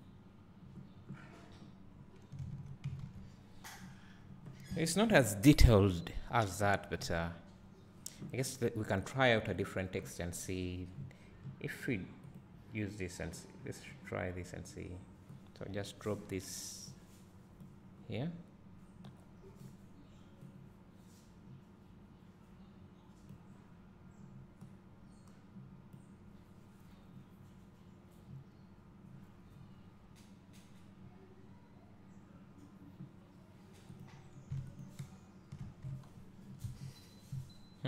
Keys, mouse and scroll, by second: 0.0 click, 2.4-2.9 scroll down 1, 2.9 a, 3.2 ctrl+s, 3.8 scroll down 2, 7.9 scroll up 1, 8.6 scroll down 1, 9.2 click, 17.8 click, 23.5-26.3 drag, 29.5 scroll up 2, 31.7 scroll down 2, 33.9 click, 35.0 ctrl+shift+click, 36.8 `, 37.2 scroll up 2.